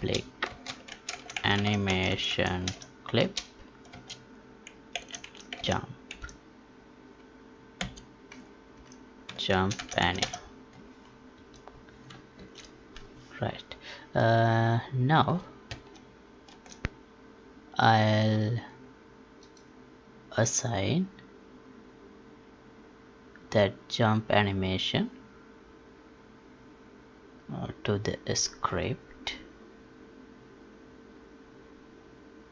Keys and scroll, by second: 0.4 space, 3.8 space, 12.3 ctrl+s, 15.9 alt+Tab.